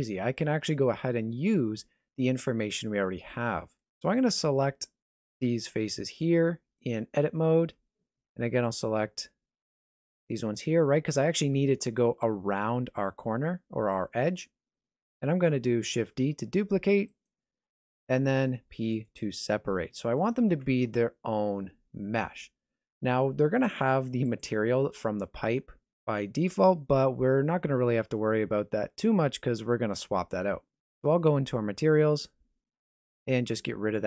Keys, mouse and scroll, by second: 3.9 Tab, 5.0 3, 5.2 alt+right click, 6.0 alt+shift+right click, 6.4 middle click, 7.5-8.1 scroll up 2, 8.7 alt+shift+right click, 9.1 middle click, 11.1 alt+shift+right click, 11.5 scroll down 1, 13.2 shift+middle click, 15.9 shift+d, 17.7 p, 19.6 Tab, 20.2 right click, 20.9 g, 32.1 click, 33.9 click.